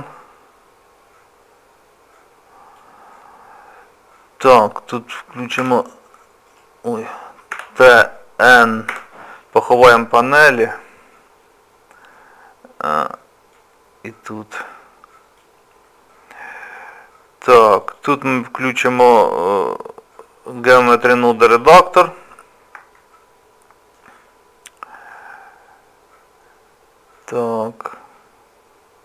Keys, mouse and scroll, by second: 5.6 b, 7.5 t, 8.9 n, 13.5 click, 20.8 click, 23.0 shift+middle click, 25.1 middle click.